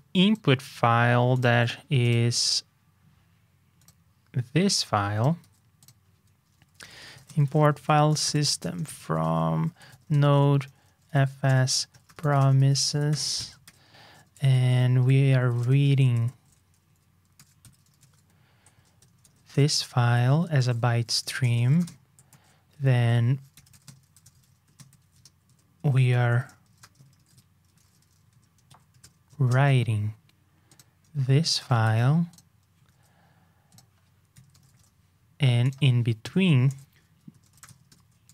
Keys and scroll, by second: 5.3 super+c, 13.1 ctrl+Return, 13.6 super+v, 14.5 ctrl+a, 15.3 shift+super+Right, 16.3 ctrl+a, 29.3 shift+super+[, 31.8 super+c, 32.9 super+v.